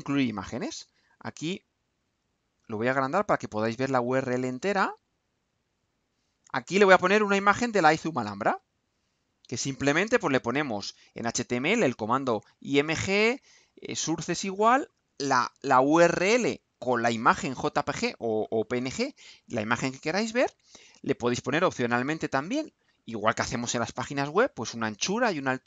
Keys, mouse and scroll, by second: 2.8-5.2 drag, 5.7 click, 6.4-7.3 drag, 8.2-10.0 drag.